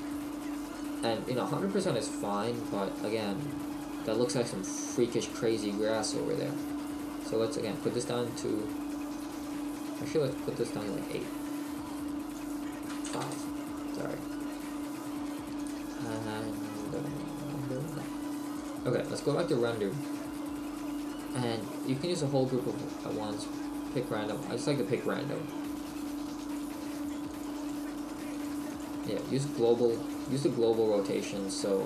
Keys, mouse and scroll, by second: 0.9 click, 0.9-6.6 scroll up 2, 13.3 click.